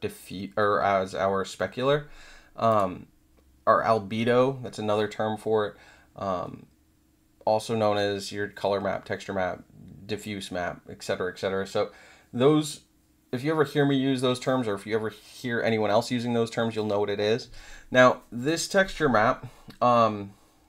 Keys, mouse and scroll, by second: 2.6 click.